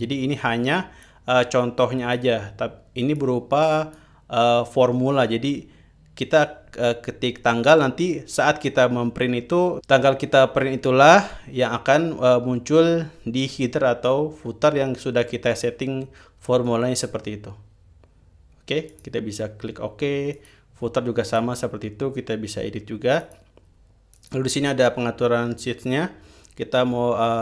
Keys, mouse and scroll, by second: 1.6-2.9 drag, 3.7 click, 19.5 click, 20.9 click, 21.9-22.6 drag, 23.7 click, 24.7-25.3 drag.